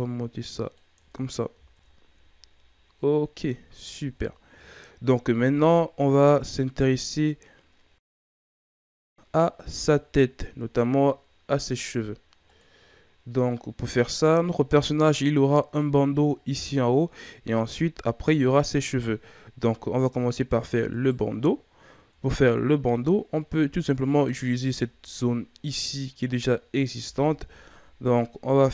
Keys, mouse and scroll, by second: 0.9 Tab, 1.3-2.4 scroll down 4, 1.5 a, 2.4-3.7 scroll up 4, 3.7-4.5 ctrl+scroll up 2, 4.5 shift+scroll up 4, 6.6 shift+scroll up 4, 8.5-9.8 scroll up 1, 9.8-10.4 shift+scroll up 4, 18.6 scroll up 2, 19.1 scroll down 4, 20.2-20.8 scroll up 5, 20.8 right click, 22.0 Tab, 24.1 alt+right click, 24.9 scroll down 4, 25.1-26.9 middle drag, 26.9 KP_1, 27.6-28.1 scroll up 5, 28.4 z.